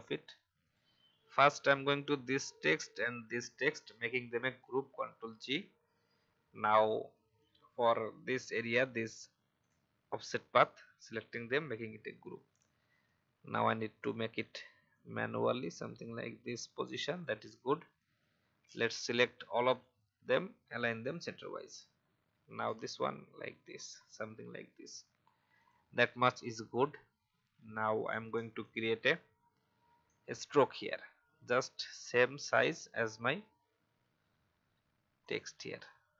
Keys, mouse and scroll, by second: 0.6 click, 3.3 shift+click, 9.6 shift+click, 13.0-16.5 drag, 22.5-24.4 typing, 23.9 Down, 25.5 click, 29.2-29.5 alt+scroll up 1, 32.4 click, 35.2 shift+click.